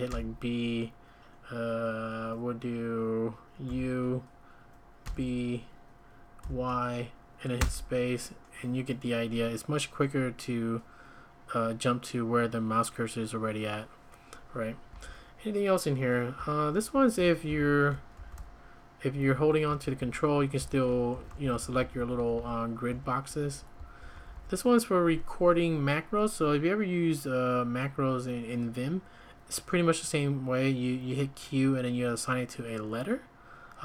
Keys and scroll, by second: 0.1 b, 3.7 u, 5.0 b, 6.2-7.6 typing, 14.9 `, 16.1-18.3 typing, 19.1 Escape, 19.3 Escape, 19.4-24.3 typing.